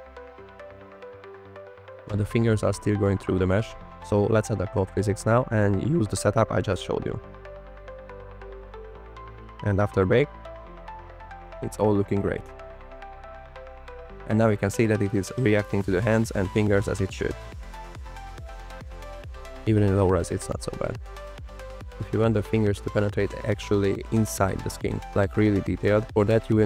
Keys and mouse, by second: 0.2 space, 0.7 space, 0.9 space, 1.4 space, 1.8 click, 3.1 Right, 3.3 Right, 4.1 click, 5.9 click, 6.0 KP_0, 6.4 click, 6.5 KP_0, 6.6 click, 6.9 click, 7.3 click, 7.5 click, 7.9 click, 8.3 click, 9.2-16.8 drag, 16.8 Right, 17.3 Right, 18.2 Right, 18.7 Right, 19.0 Right, 19.3 Right, 19.6 Right, 19.9 Right, 20.2 Right, 20.4 Right, 20.6 space, 20.6 Right, 20.9 Right, 21.2 Right, 21.5 Right, 21.7 Right, 22.0 Right, 22.8 click, 23.2 space.